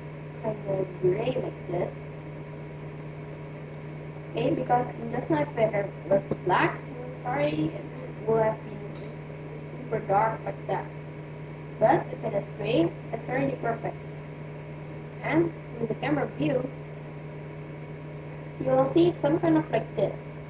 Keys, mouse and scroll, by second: 15.0 KP_0.